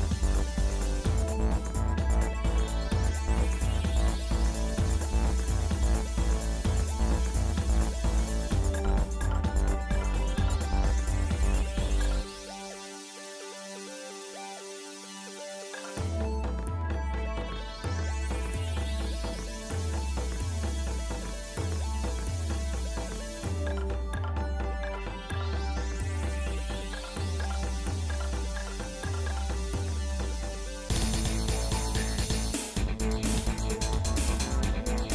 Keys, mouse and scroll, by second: 0.0 scroll down 1, 2.0 middle click, 2.8 ctrl+Tab, 4.6 z, 5.8 click, 6.3 click, 7.6 click, 9.6 KP_7, 10.8-11.2 scroll up 3, 13.0 shift+middle click, 13.8 z, 15.0 middle click, 15.5 z, 16.8 middle click, 17.4 shift+middle click, 18.4 scroll down 1, 19.0 scroll down 1, 20.8-21.2 scroll down 2, 21.2 middle click, 21.7-23.9 shift+middle drag, 27.4 ctrl+shift+right click, 27.7 z, 29.9 ctrl+z, 31.3 z, 32.5 ctrl+shift+right click, 33.9 ctrl+z, 34.5 ctrl+shift+right click.